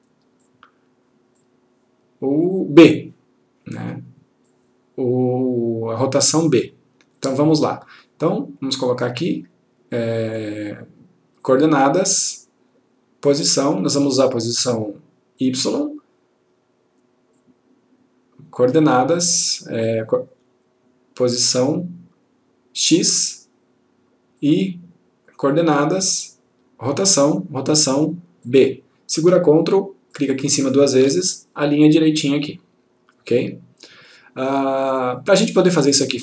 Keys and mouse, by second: 4.5-6.4 click, 15.5 click, 17.5 click, 22.9 click, 28.5 click, 30.2 ctrl+click, 35.2-36.2 click.